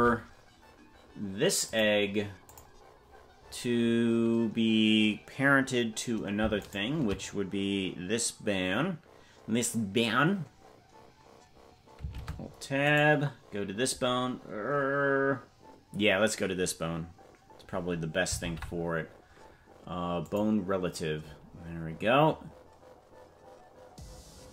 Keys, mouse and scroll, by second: 1.6 click, 2.4 click, 6.7 shift+right click, 12.1 ctrl+Tab, 13.0 right click, 18.4 ctrl+p.